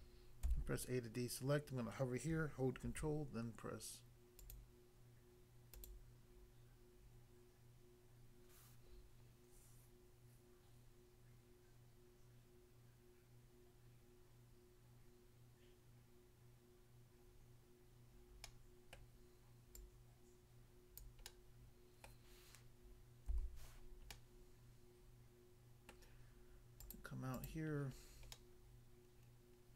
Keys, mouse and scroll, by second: 0.4 a, 2.8 ctrl+r, 4.3 click, 4.5 click, 5.8 click, 5.9 click, 18.5 middle click, 19.0 middle click, 19.8 click, 21.0 click, 21.3 middle click, 22.1 middle click, 23.3 a, 23.8-24.1 scroll down 1, 24.1 middle click, 25.9 middle click, 26.8 click, 26.9 click, 27.4 click, 27.5 double click, 28.0 scroll down 1, 28.3 middle click.